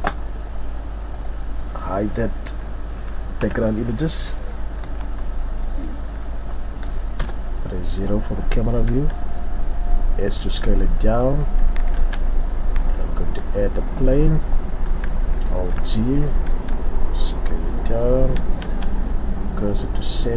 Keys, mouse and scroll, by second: 3.4 n, 4.9 Tab, 5.2-5.7 scroll down 4, 5.7 middle click, 6.0-6.3 scroll up 4, 7.2 KP_0, 11.2-11.9 scroll up 1, 11.9 shift+a, 15.5 alt+g, 16.5 s, 18.7 shift+s.